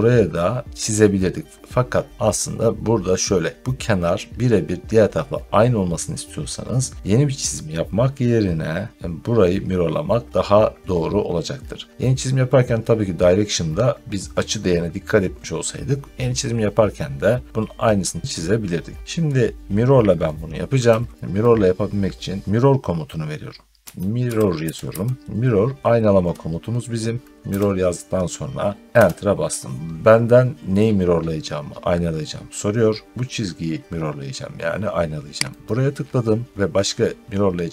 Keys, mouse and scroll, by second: 23.5-26.1 typing, 27.3 BackSpace, 28.8 Return, 35.5-37.7 drag.